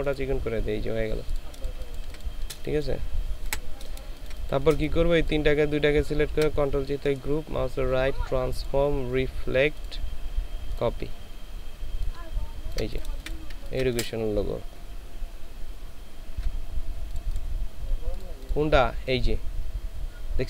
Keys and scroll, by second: 1.7 ctrl+space, 3.5 Delete, 4.0 ctrl+Delete, 4.1 ctrl+space, 6.3 ctrl+g, 13.1 ctrl+shift+space.